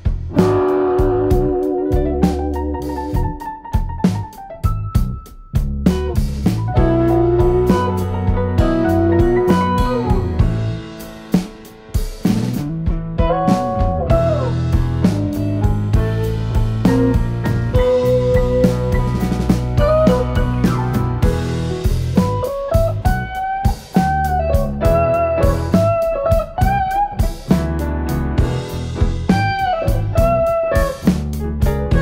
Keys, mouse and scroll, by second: 2.0 shift+middle click, 5.3 click, 5.8 KP_Decimal, 6.5 Tab, 7.2 middle click, 9.3 ctrl+r, 11.1 click, 13.4 click, 13.7 middle click, 15.2 Tab, 16.2 ctrl+3, 17.0 middle click, 23.4 click, 23.9 scroll down 2, 25.0-25.5 scroll down 1, 25.0 KP_1, 26.8 g, 29.8 click, 30.6 click.